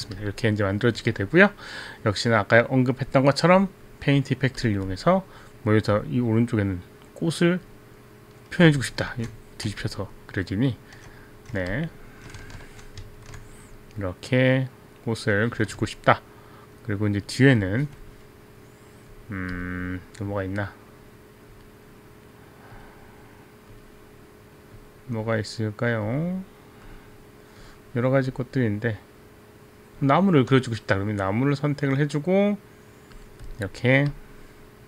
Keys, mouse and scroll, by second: 0.3 alt+click, 4.7 click, 6.1 click, 9.1 ctrl+z, 11.0 right click, 11.9 alt+click, 11.9 right click, 12.8 ctrl+z, 13.0 ctrl+z, 13.8 click, 16.5 alt+click, 17.7 alt+click, 19.7 click, 20.4 click, 21.6 click, 22.8 click, 23.8 click, 24.9 click, 26.2 click, 27.2 click, 27.7 click, 28.4 click, 29.7 click, 33.2 click.